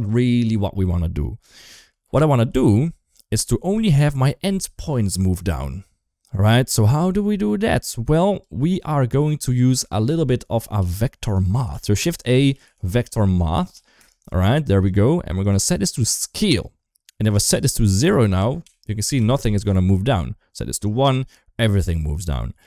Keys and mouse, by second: 7.5-8.2 drag, 10.6 g, 11.5 shift+a, 13.5 Down, 15.2-16.4 drag, 16.9 shift+middle click, 17.6-19.1 drag, 20.7 shift+click, 22.3 ctrl+z.